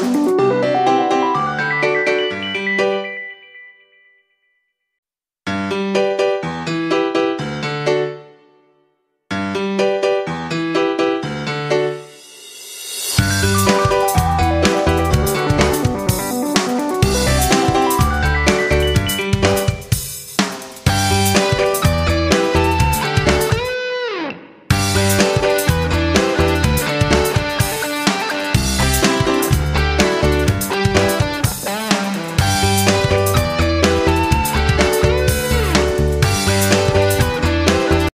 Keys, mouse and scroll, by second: 7.5 click, 8.4 shift+Up, 8.6 shift+Right, 8.8 shift+Up, 9.0 shift+Right, 9.3 shift+Up, 10.9-13.6 drag, 15.9 ctrl+shift+g, 16.9 F9, 19.0 F5.